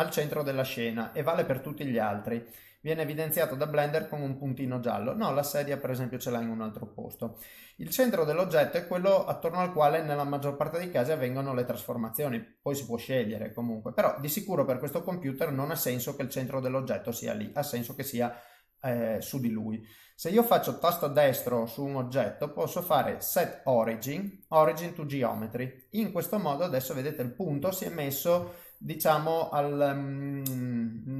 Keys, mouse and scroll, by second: 0.6 middle click, 1.4 click, 1.8 middle click, 2.8 click, 3.2 middle click, 4.1 middle click, 6.2 middle click, 8.2 click, 8.7 middle click, 9.4 click, 9.8 middle click, 12.4 middle click, 13.8 click, 14.2 middle click, 16.9 middle click, 18.0 middle click, 20.8 shift+middle click, 21.5 right click, 25.7 middle click, 27.2 middle click, 27.7 ctrl+middle click, 28.4 shift+middle click, 29.0 middle click.